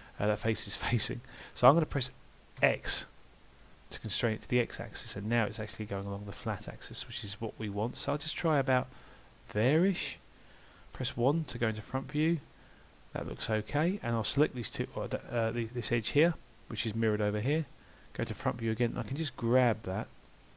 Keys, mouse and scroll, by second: 11.0 KP_1, 13.7 middle click, 15.6 2, 16.2 click, 18.3 KP_1, 19.2 g.